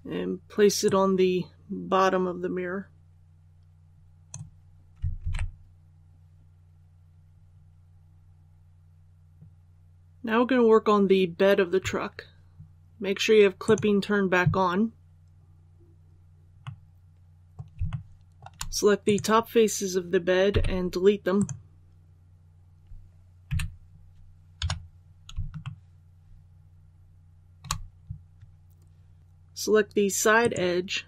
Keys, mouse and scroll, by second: 0.7-4.5 drag, 5.1 alt+a, 6.8 scroll down 1, 9.3 click, 14.6 scroll down 1, 16.5 middle click, 17.8 shift+middle click, 18.9 right click, 20.4 x, 21.2 click, 23.4 2, 24.5 KP_7, 25.5-27.5 shift+middle drag, 26.5-27.5 scroll up 1, 29.2 alt+a, 30.3 right click.